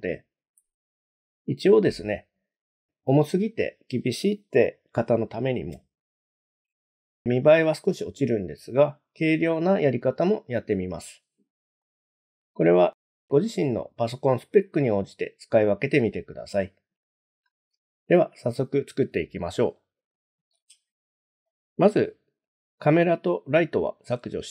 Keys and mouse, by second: 11.8 middle click, 20.6 click, 21.5 shift+click, 24.0 x.